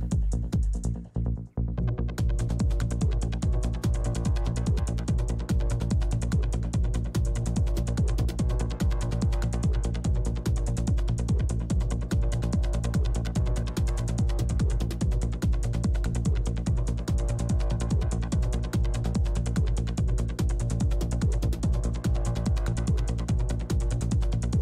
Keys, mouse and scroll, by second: 1.3 f, 1.6-4.2 drag, 1.6 middle click, 1.9 f, 2.3 middle click, 3.6-5.3 middle drag, 4.2 f, 4.3-5.9 drag, 5.5 middle click, 6.7 f, 7.7 f, 9.1 middle click, 10.2-12.6 typing, 11.0 click, 12.0-13.7 drag, 13.5-15.5 middle drag, 13.9 f, 14.1-16.3 drag, 14.7 f, 16.0-17.2 middle drag, 16.6 click, 17.3-18.4 middle drag, 17.5 f, 17.8 click, 18.5 middle click, 19.2 click, 19.2 f, 20.4-22.5 drag, 21.3 f, 23.2 click, 24.5 i.